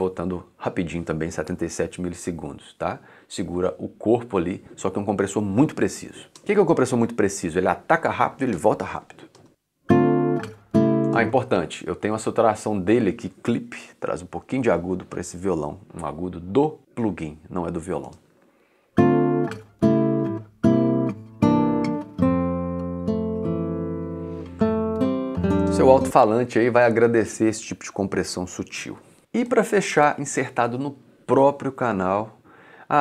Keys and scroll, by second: 6.3 space, 9.5 space, 11.1 space, 18.0 space, 25.6 space, 29.2 c.